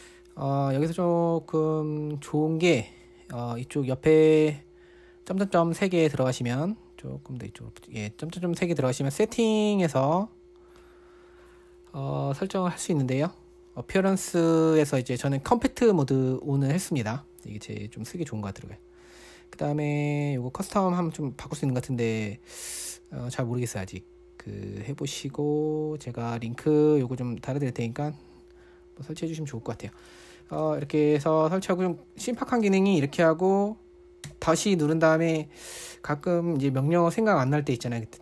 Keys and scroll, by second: 10.9 typing, 19.3 typing, 28.6 typing, 30.6-33.3 typing, 34.7 typing.